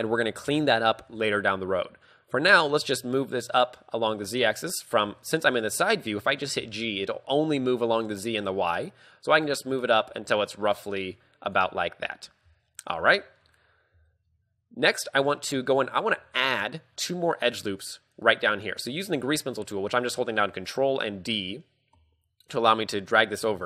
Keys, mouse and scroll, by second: 0.5 z, 0.9 shift+middle click, 4.4 g, 5.3 shift+middle click, 12.9 scroll down 3, 13.2 shift+middle click, 13.7-14.1 scroll down 5, 14.2 shift+middle click, 14.5-15.3 scroll up 1, 15.3-16.2 scroll up 1, 16.2 scroll down 1, 16.5 ctrl+d, 16.6 ctrl+click, 17.7 ctrl+d, 17.9 ctrl+d, 18.3 ctrl+d, 18.3 ctrl+click, 23.1-23.6 scroll up 3.